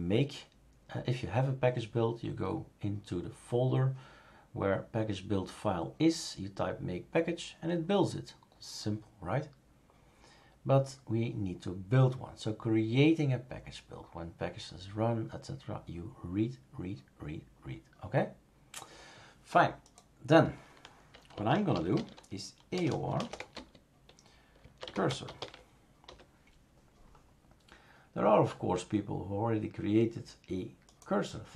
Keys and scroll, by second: 21.1-25.9 typing, 26.1 Return.